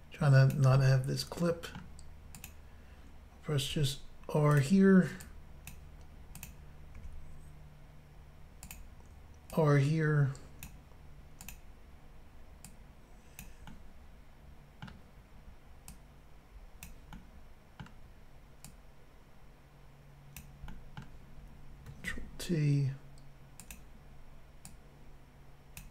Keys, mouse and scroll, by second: 0.5 click, 0.8 middle click, 2.4 click, 2.5 click, 3.7 r, 3.8 click, 4.5 click, 4.6 click, 5.2 click, 6.4 click, 6.5 click, 7.0 r, 8.7 click, 8.8 click, 9.6 click, 11.5 click, 11.5 click, 12.7 click, 13.7 middle click, 15.9 click, 17.2 middle click, 18.7 click, 20.7 middle click, 22.1 ctrl+t, 23.7 click, 24.7 click.